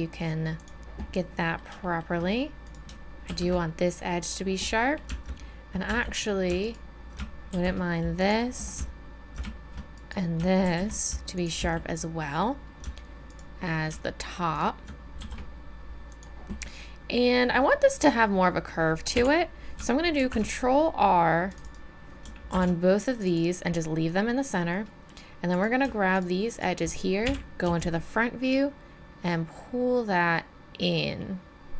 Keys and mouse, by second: 1.1 click, 2.6 right click, 3.2 shift+e, 5.9 z, 7.5 shift+e, 10.0 click, 10.6 shift+e, 11.6 z, 15.2 shift+e, 19.1 KP_1, 20.2 ctrl+r, 22.5 ctrl+r, 24.7 click, 27.2 KP_1, 27.6 z.